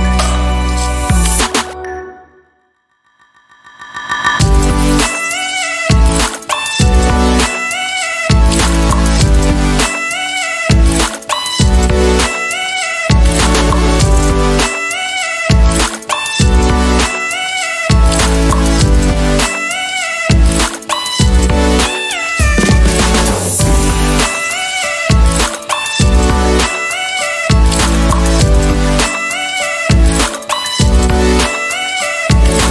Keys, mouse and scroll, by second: 1.2 click, 2.3 click, 3.9 click, 4.6 click, 5.6 click, 9.0-12.8 ctrl+shift+drag, 12.9 ctrl+shift+click, 14.0 ctrl+d, 14.2-15.4 ctrl+drag, 16.0 ctrl+click, 17.7 Up, 20.3 click, 21.4 ctrl+d, 22.4-23.9 ctrl+shift+drag, 24.3 ctrl+shift+space, 24.8-25.4 ctrl+shift+scroll up 2, 26.6 d, 29.2-30.8 ctrl+drag, 31.1 ctrl+shift+click, 32.0 ctrl+shift+KP_Subtract.